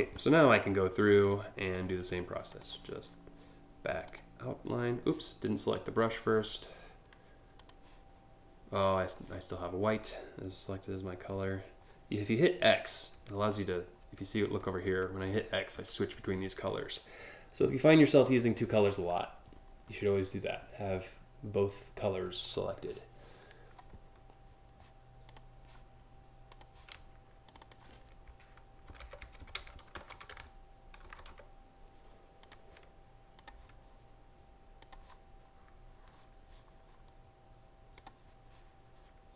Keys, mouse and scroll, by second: 0.9 click, 1.3 click, 2.1 click, 3.7 click, 5.6 click, 7.2 click, 12.3-15.8 typing, 17.9 click, 22.1 click, 24.9 click, 26.1 click, 27.1 click, 27.3 click, 28.4-30.7 typing, 32.1 click, 33.0 click, 34.4 click, 37.6 click.